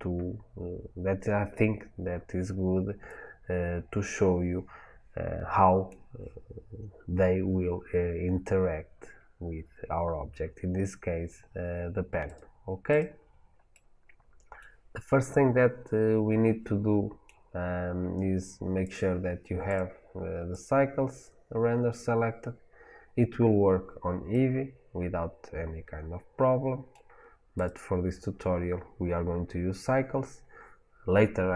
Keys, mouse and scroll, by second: 9.5-10.9 scroll down 2, 10.9-12.1 scroll down 1, 12.1-13.6 drag, 13.6-20.5 middle drag, 20.5-24.2 drag, 24.2-27.4 middle drag, 27.4 click.